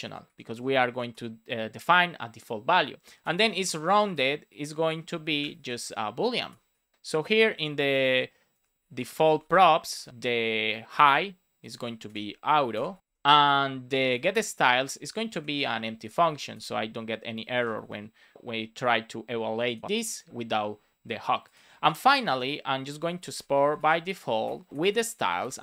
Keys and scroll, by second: 0.5 Return, 2.1 Return, 3.8 shift+r, 4.8 Return, 5.1 shift+;, 5.3 space, 5.5 shift+p, 6.4 Return, 6.9 Down, 7.0 Return, 7.6 shift+p, 8.4 Return, 9.5 Return, 9.9 BackSpace, 10.8 Return, 11.5 Return, 11.8 shift+;, 12.0 shift+space, 12.6 shift+i, 12.7 shift+space, 13.0 End, 13.2 Return, 14.2 Return, 15.1 Down, 15.5 Return, 15.8-17.7 typing, 22.1 Return, 23.3 space, 24.4 Return, 24.7 space, 25.2 shift+s.